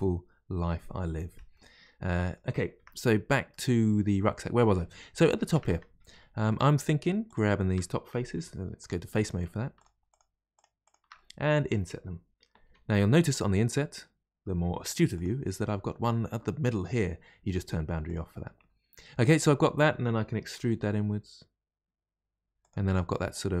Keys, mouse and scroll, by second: 2.7 Tab, 2.9-3.5 scroll down 2, 3.5-5.1 middle drag, 5.1 click, 5.5 Tab, 6.1-7.2 shift+middle drag, 7.2 click, 8.3 3, 8.7 click, 9.1 shift+click, 9.7 shift+click, 10.0 shift+click, 10.5 shift+click, 10.8 shift+click, 11.1-12.6 middle drag, 16.7-18.0 middle drag, 18.0 click, 18.5-20.5 middle drag, 20.5 e, 22.9 middle click.